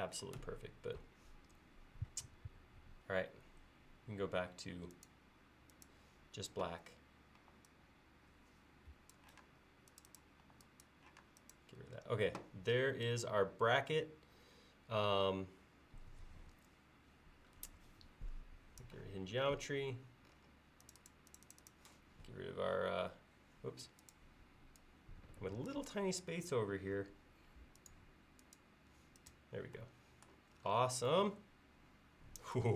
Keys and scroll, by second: 7.4 e, 9.0 Escape, 9.4 space, 10.5 e.